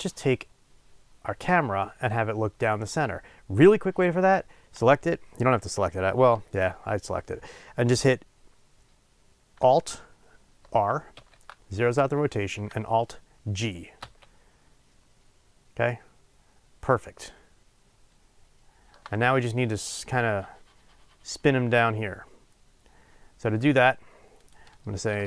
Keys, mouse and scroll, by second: 4.3 click, 11.2 alt+r, 13.9 alt+g.